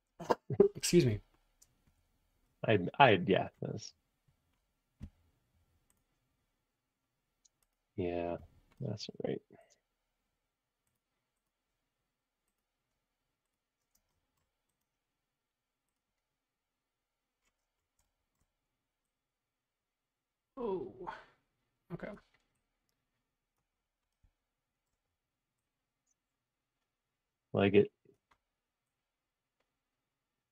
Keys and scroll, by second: 14.0 space.